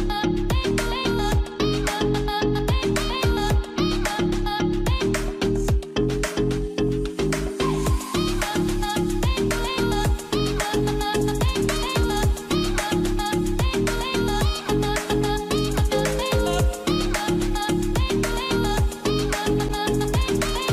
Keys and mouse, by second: 2.3 shift+middle click, 3.8 shift+middle click, 4.4 click, 5.3 click, 6.0 ctrl+z, 6.5 shift+middle click, 7.3 shift+middle click, 8.1 ctrl+s, 8.8 shift+middle click, 11.9 k, 15.1 k, 17.3 k.